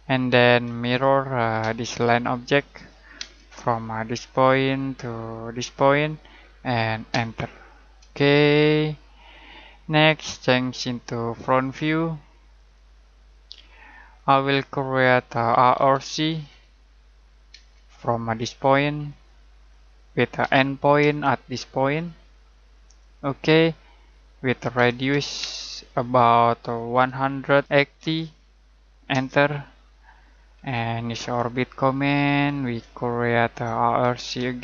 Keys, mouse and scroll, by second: 0.6 m, 1.6 space, 2.3 click, 3.1 space, 4.5 click, 7.1 space, 8.5 middle click, 11.2 click, 13.5 middle click, 15.2-16.3 typing, 17.5 space, 19.0 click, 20.3 e, 20.9 space, 22.9 click, 24.7 r, 25.3 space, 26.8-28.1 typing, 29.1 Return, 30.4 middle click, 31.5 shift+middle click, 32.9 middle click, 33.7-34.6 typing.